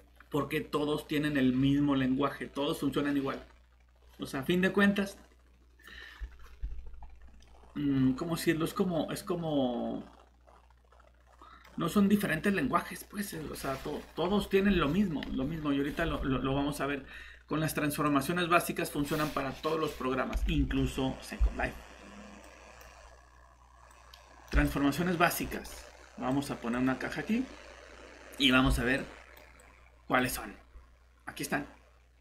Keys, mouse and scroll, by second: 13.2 click, 20.5 alt+shift+Tab, 25.6 right click, 26.3 click, 27.1 typing, 29.2 typing, 32.0 typing.